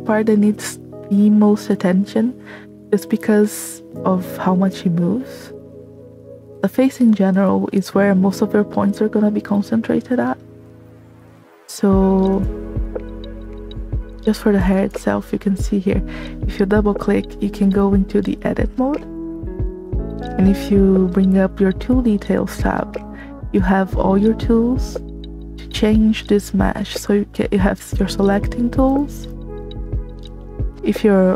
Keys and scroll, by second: 12.3 space.